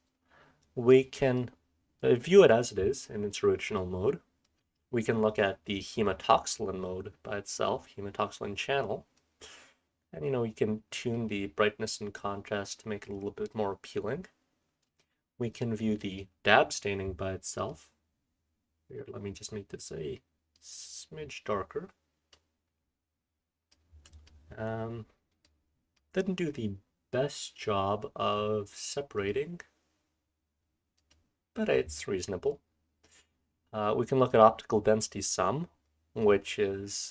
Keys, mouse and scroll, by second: 2.7-4.6 scroll down 1, 4.6-10.6 scroll down 1, 10.6-14.1 scroll down 1, 14.1-16.2 scroll up 1, 16.2-19.0 scroll up 1, 19.0-22.7 scroll up 1, 22.7-23.7 scroll down 1, 23.7-24.2 drag, 23.7-24.6 scroll down 1, 24.6-27.5 scroll up 1, 25.4-25.9 drag, 35.2-35.8 scroll down 2, 35.8-36.2 drag, 35.8-36.5 scroll down 1, 36.5-37.1 scroll up 1.